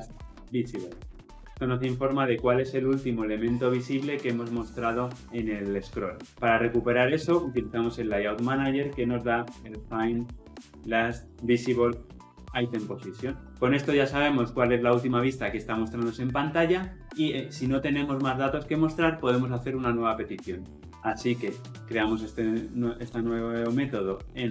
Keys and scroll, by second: 8.9 Return, 21.0 alt+Return.